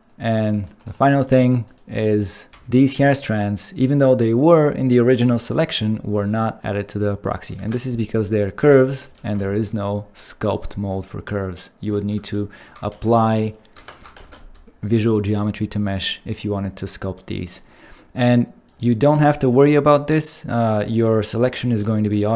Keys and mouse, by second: 2.1 click, 2.5 g, 3.0 right click, 7.6 Tab, 8.6 g, 9.0 right click, 9.4 ctrl+Tab, 12.9 ctrl+a, 13.8 Tab, 14.2 ctrl+a, 18.7 click.